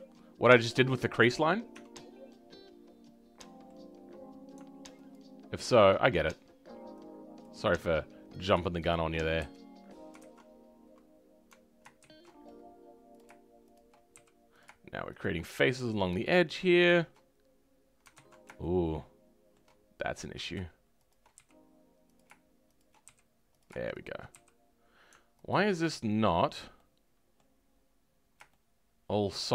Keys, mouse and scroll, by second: 1.7 Tab, 2.3-3.9 middle drag, 3.9 scroll up 1, 5.1 alt+click, 8.9 shift+click, 9.4 f, 10.5-11.0 scroll up 2, 11.0-12.0 scroll down 2, 12.0 ctrl+shift+z, 13.1 click, 14.1 f, 16.3-18.1 scroll up 1, 18.1 ctrl+z, 18.6-20.4 shift+middle drag, 20.4 click, 21.3 f, 22.1 click, 23.0 f, 23.6 click, 24.3 f, 25.5 alt+click, 26.3-26.7 scroll down 1, 26.7-27.9 middle drag, 27.9-28.5 scroll up 1, 28.5-29.5 shift+middle drag.